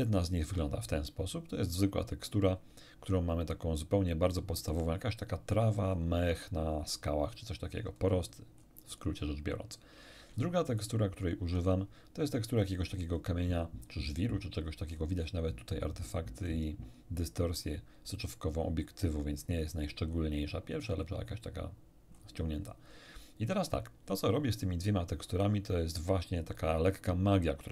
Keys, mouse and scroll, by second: 0.0 ctrl+shift+click, 5.6-6.4 scroll up 2, 6.8-8.2 scroll down 2, 8.6 middle click, 10.8 ctrl+shift+click, 12.6 middle click, 13.1 middle click, 14.4 scroll down 2, 14.9-15.8 scroll up 2, 19.0-21.4 scroll down 5, 22.1-23.0 scroll up 2.